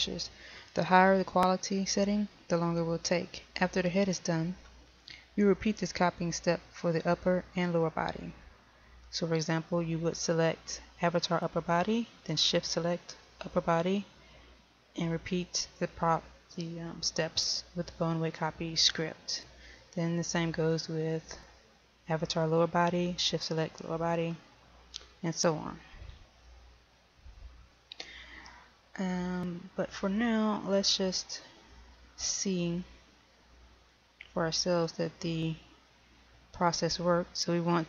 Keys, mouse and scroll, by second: 32.4 right click, 35.5-37.8 drag.